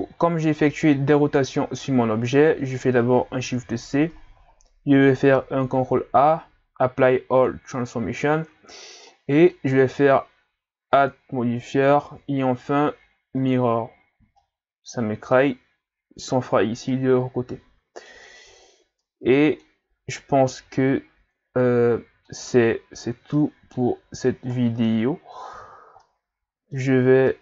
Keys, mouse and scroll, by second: 0.2-0.8 scroll down 3, 0.8 middle click, 1.4-2.0 scroll up 1, 2.0-3.3 scroll up 1, 3.3 scroll up 1, 3.4 shift+c, 4.3 scroll down 1, 4.5 scroll up 4, 5.0 ctrl+scroll down 4, 5.7 ctrl+a, 9.1-10.9 middle drag, 10.9-13.9 drag, 14.4-18.5 middle drag, 18.5-19.0 scroll down 5, 19.0-20.5 middle drag, 20.5 scroll down 3, 20.8-22.7 middle drag, 22.7-23.4 scroll up 3, 23.4-25.1 middle drag, 25.1-26.0 scroll up 10, 26.0-26.9 middle drag, 26.9 scroll up 3, 27.3-27.4 middle drag.